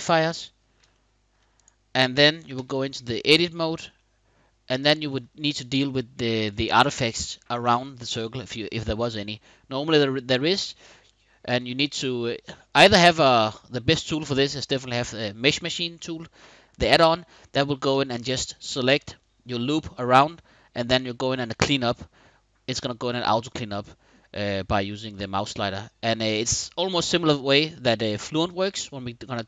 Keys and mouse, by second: 0.7-1.0 shift+middle drag, 1.2 click, 2.2 Tab, 3.6 middle click, 4.6 shift+click, 10.2 shift+click, 10.9 click, 11.1 middle click, 12.0 click, 12.8 shift+click, 13.3 shift+middle click, 13.7 shift+click.